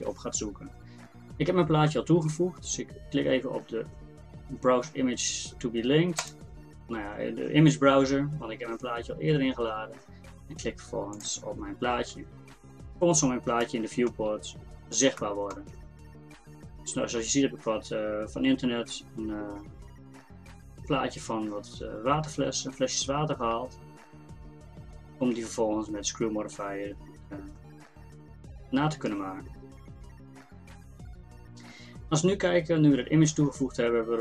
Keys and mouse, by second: 13.6-18.6 middle drag, 28.1-34.2 drag.